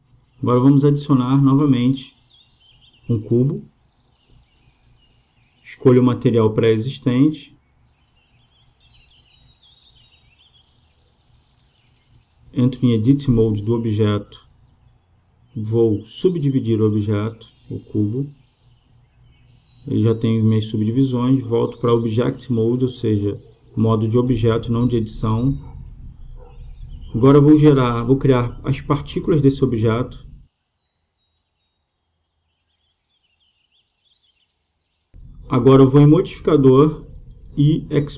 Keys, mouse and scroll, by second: 1.7 space, 5.7-8.6 drag, 11.5-13.2 middle drag, 14.0-15.9 drag, 19.0-21.8 drag, 23.5-25.4 drag, 25.6-28.7 middle drag, 28.7-31.4 drag, 33.3-35.0 drag, 36.0-37.9 drag.